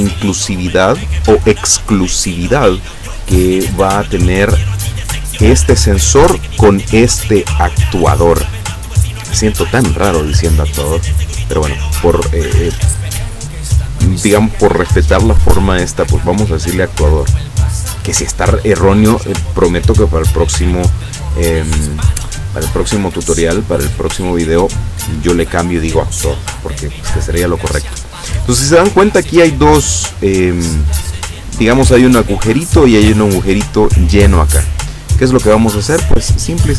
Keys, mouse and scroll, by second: 13.5-14.5 drag, 16.0 click, 36.6-36.7 drag.